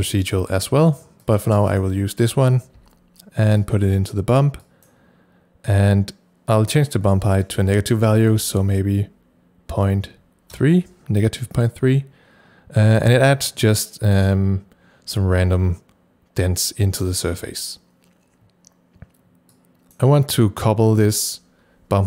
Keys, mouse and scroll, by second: 1.2 click, 2.8 c, 3.6-8.1 drag, 4.9 c, 8.1 KP_Subtract, 8.3 KP_Decimal, 9.8 KP_3, 10.5 KP_Enter, 19.6 KP_Enter, 19.6 click, 19.6 KP_3.